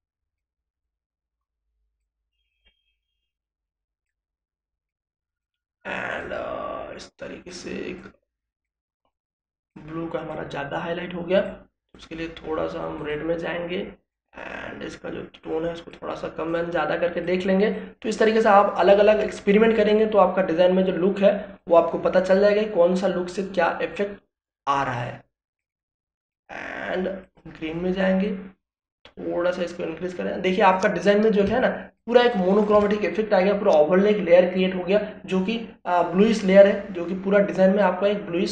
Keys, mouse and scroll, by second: 30.8 ctrl+space, 30.9 ctrl+click, 31.3 ctrl+space, 31.6 ctrl+click, 31.6 ctrl+space, 38.2-38.5 drag.